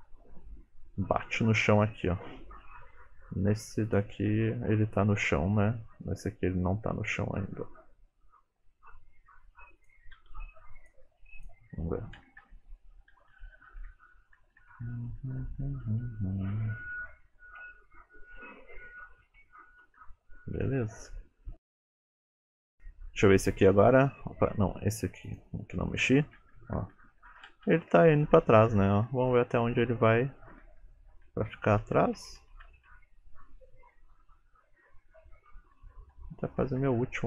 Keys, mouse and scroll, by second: 0.3 Right, 1.5 Left, 2.0 Right, 3.9 click, 5.5 Left, 6.3 Left, 7.4 Right, 7.8 Left, 9.2 g, 10.2 r, 11.1 g, 12.3 Right, 12.5 Right, 13.2 Left, 13.4 Left, 13.7 Right, 13.9 Right, 14.4 Right, 14.7 Right, 14.9 Right, 15.1 Right, 15.4 Right, 15.6 Right, 15.8 Right, 16.0 Right, 16.4 Right, 16.6 Right, 16.9 Right, 17.2 Right, 17.7 Right, 18.5 Left, 18.9 Right, 19.4 Left, 19.9 Right, 20.2 Left, 20.5 Left, 20.6 Left, 20.8-21.9 Left, 22.7 click, 25.3 click, 26.6 Left, 26.8 Left, 27.0 Left, 27.2 Left, 27.4 Left, 27.6-28.4 Right, 28.6 Right, 28.8 Right, 28.9 Right, 29.1 Right, 29.3 Right, 29.5 Right, 29.7 Right, 29.9 Right, 30.1 Right, 30.3 Right, 30.5 Right, 30.7 Right, 30.9 Right, 31.0 Right, 31.3 Right, 31.6 Right, 31.8 Right, 32.0 Right, 32.2 Right, 32.5 Right, 32.7 Right, 32.9 Right, 33.9 Left, 34.6 Left, 34.8 Left, 35.1 Left, 35.4 Right, 35.7 Right, 36.0 Right, 36.5 Right, 36.9 Right.